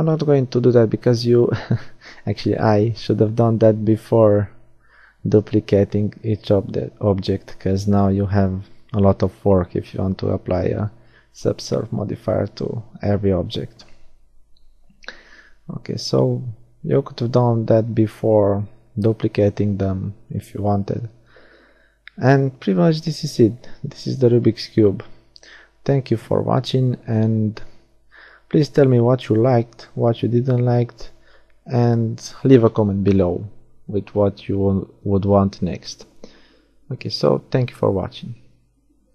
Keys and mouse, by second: 2.8-5.4 drag, 5.4 middle click, 6.7 Tab, 9.9-11.6 middle drag, 14.8 middle click, 15.1 a, 15.5 middle click, 15.9 middle click, 16.3 click, 16.6-18.4 middle drag, 27.0-39.1 middle drag.